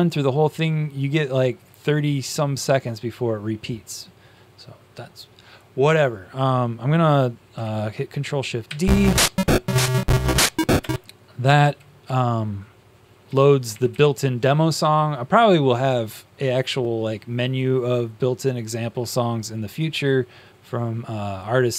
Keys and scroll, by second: 8.6 ctrl+shift+d, 12.0 Down, 13.2 Down.